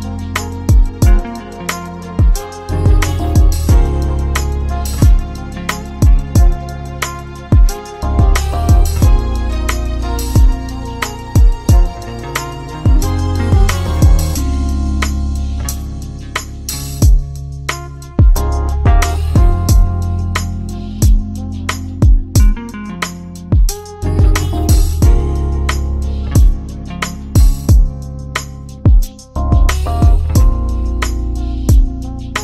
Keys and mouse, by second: 3.9-5.7 middle drag, 5.7 shift+click, 6.6 shift+click, 8.1 shift+d, 15.8 Tab, 18.1 click, 18.8-21.1 middle drag, 21.1-22.6 drag, 23.3-24.7 middle drag, 24.7 g, 29.4-32.4 middle drag.